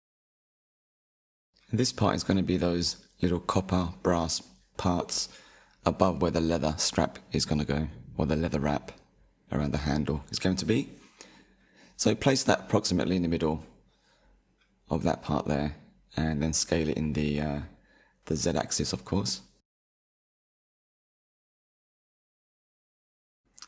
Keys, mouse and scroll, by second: 0.6-1.6 drag, 3.3 s, 6.9 scroll up 5, 7.4-8.0 shift+middle drag, 8.0-9.2 scroll up 4, 9.2-10.2 shift+middle drag, 10.2 click, 13.7-14.2 scroll down 2, 14.2-17.2 shift+middle drag, 21.0 s.